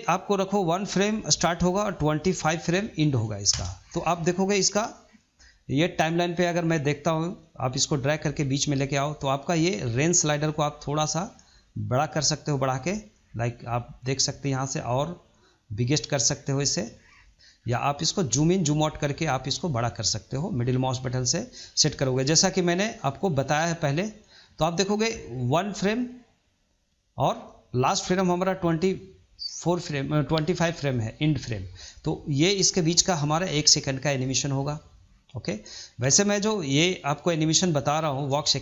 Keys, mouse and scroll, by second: 7.3-10.1 middle drag, 10.1-12.8 drag, 12.8-14.2 middle drag, 14.2-15.9 drag, 15.9-17.5 middle drag, 17.5-18.0 scroll down 1, 18.0-19.2 scroll up 1, 19.2-19.9 scroll up 9, 19.9-23.0 middle drag, 23.7-38.6 drag.